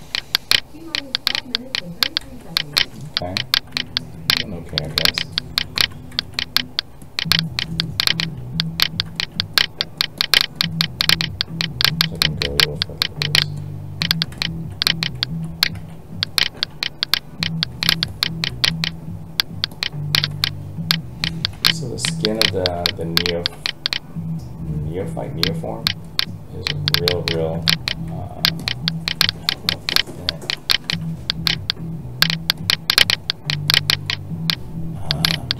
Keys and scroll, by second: 15.7 alt+a.